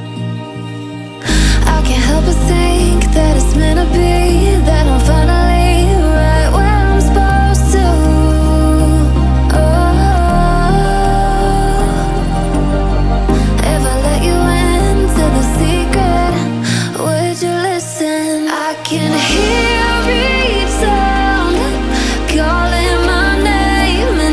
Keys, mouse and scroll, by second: 0.3-0.6 alt+scroll up 1, 0.6 alt+scroll down 1, 1.3 alt+scroll up 1, 2.8 click, 4.2 alt+scroll up 1, 5.4 click, 7.8 alt+scroll up 1, 9.2 click, 13.9 click, 16.1 Delete, 17.0 alt+scroll down 1, 17.6 click, 18.0 scroll up 1, 19.3 click, 20.0 Delete, 20.8 alt+scroll down 1, 21.3 click, 21.6 alt+scroll up 1, 22.6 click, 23.4 alt+scroll up 1, 23.9-24.2 alt+scroll down 1, 24.2-24.3 alt+scroll up 1.